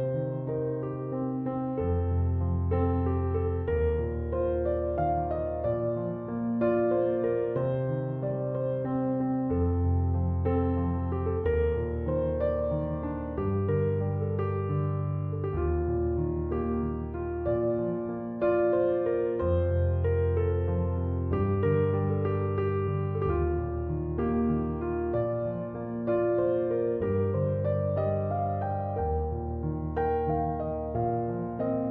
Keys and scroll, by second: 25.9-27.8 typing.